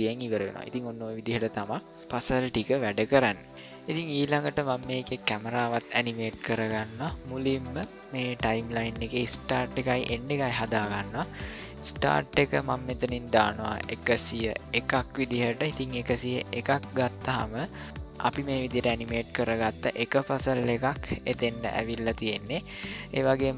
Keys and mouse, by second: 11.8-16.4 drag, 17.8 click.